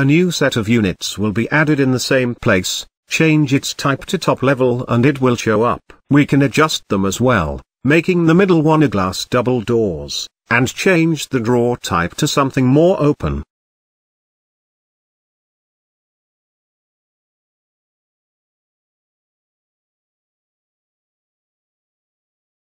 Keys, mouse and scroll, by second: 0.5-3.2 drag, 3.2 scroll down 2, 3.5-4.6 shift+middle drag, 4.6 n, 5.4-7.2 shift+middle drag, 7.8-9.1 scroll up 1, 9.1-9.6 scroll up 1, 10.0-11.8 drag, 16.3-17.3 scroll down 8, 17.3-19.2 drag, 20.1-21.9 drag, 21.9-22.4 scroll down 1, 22.4-22.7 middle drag.